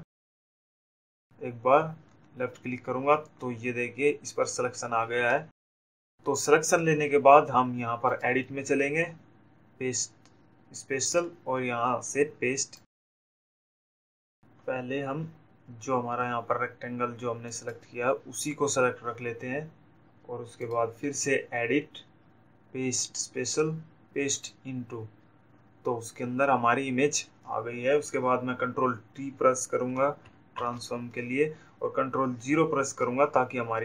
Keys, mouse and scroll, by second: 1.8 ctrl+click, 9.4 click, 14.3 click, 19.9 click, 21.6 click, 25.3 click, 33.0 ctrl+t.